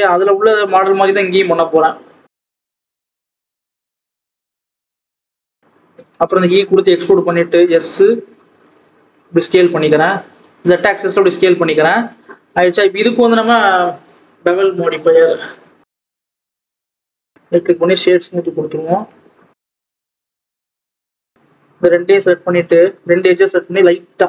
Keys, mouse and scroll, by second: 0.0 scroll up 1, 0.2 Tab, 0.5 g, 1.5-1.9 scroll down 2, 1.9 Tab, 2.3 click, 2.8 s, 4.1 Tab, 4.3 g, 5.2 click, 5.4 Tab, 5.6 click, 6.2 e, 7.4 s, 11.1 click, 11.9-12.3 scroll up 2, 12.3 ctrl+s, 12.5 scroll down 2, 12.6 Tab, 14.5-17.8 drag, 17.8 right click, 17.9 scroll up 1, 18.2 alt+a, 18.3-18.7 scroll down 2, 18.7 click, 19.3 Tab, 19.5 click, 20.0 2, 20.1 click, 20.7 click, 22.9 shift+click, 23.7 ctrl+b.